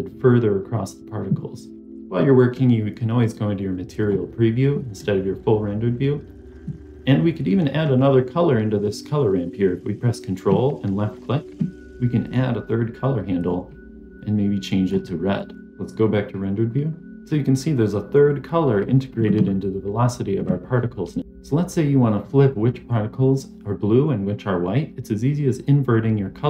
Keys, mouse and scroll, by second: 4.0 click, 11.0 ctrl+click, 12.1 click, 13.2 click, 15.6 click, 21.2 click.